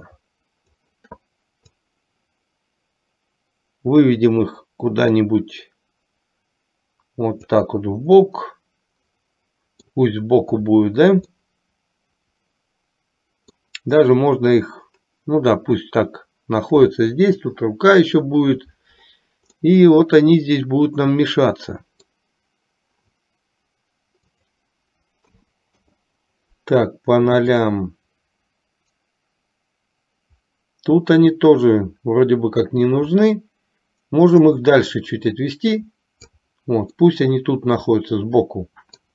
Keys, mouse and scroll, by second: 1.8-7.6 drag, 8.4 scroll up 1, 8.6-10.0 middle drag, 10.0 scroll down 1, 11.5 scroll up 1, 11.7-13.9 middle drag, 19.7-22.4 middle drag, 24.4-26.2 drag, 27.7-36.6 drag, 32.9-36.6 right drag, 37.1-39.1 middle drag.